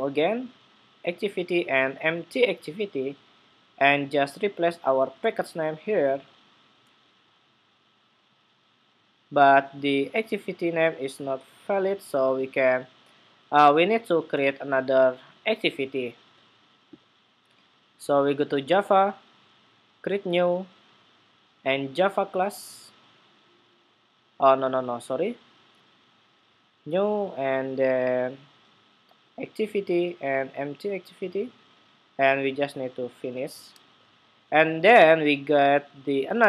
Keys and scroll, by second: 4.9 super+v.